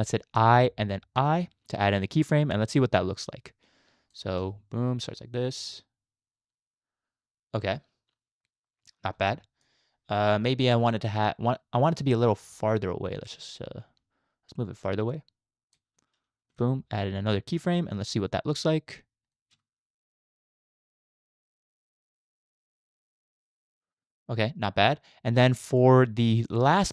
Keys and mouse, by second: 0.4 i, 1.2 i, 2.8-4.1 drag, 4.5 space, 9.1 space, 9.6-10.9 drag, 12.5 shift+click, 13.7-15.8 shift+drag, 16.5 i, 18.3-19.3 drag, 19.5 space, 25.3 space, 25.5-26.9 drag.